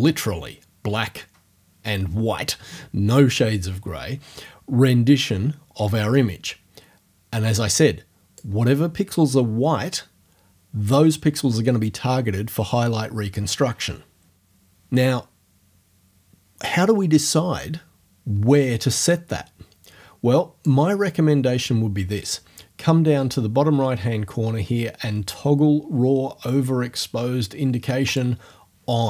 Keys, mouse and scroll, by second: 19.1-20.8 drag, 28.1 click.